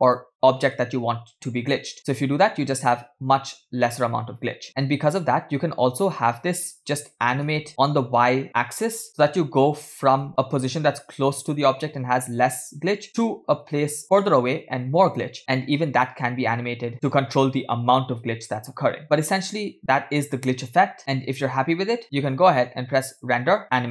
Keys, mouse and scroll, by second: 0.9 space, 4.9 space, 7.0 space, 7.3 g, 10.8 g, 19.0 space, 20.6 space, 22.6 space, 23.2-23.9 drag.